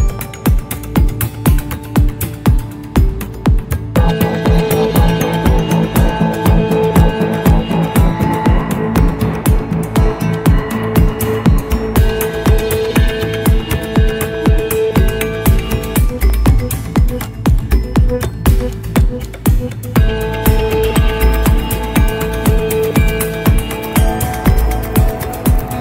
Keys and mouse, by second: 6.6 click, 11.6 click, 14.8 click, 16.0-18.5 drag, 20.4 middle click, 22.3 click, 23.3 middle click.